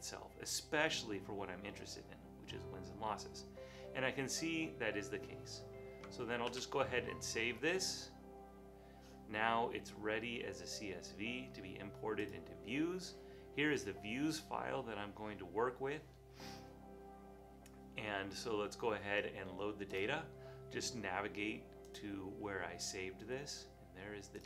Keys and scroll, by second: 6.6 super+s.